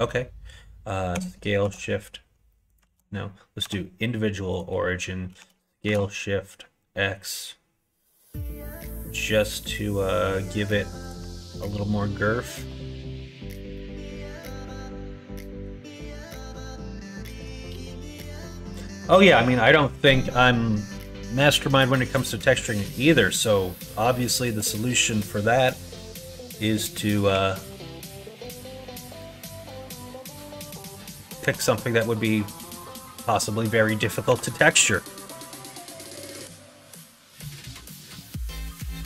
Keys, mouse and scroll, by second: 1.1 s, 2.8 ctrl+z, 3.6 ., 5.3 s, 11.5-12.8 middle drag, 13.8-17.4 middle drag, 17.4 scroll down 1, 17.8 middle click, 18.1 scroll down 1, 20.8 scroll up 1, 20.9 middle click, 21.6 scroll up 1, 21.8 middle click, 22.5 scroll up 1, 22.6 middle click, 22.8 right click, 23.1 middle click, 23.3 right click, 23.9 middle click, 24.1 right click, 24.3 shift+middle click, 24.4 shift+right click, 25.0 middle click, 26.9 scroll up 1, 27.0 middle click, 27.2 2, 28.4 click, 29.1 click, 30.4 middle click, 31.1 KP_1, 31.4 KP_3, 34.4 r.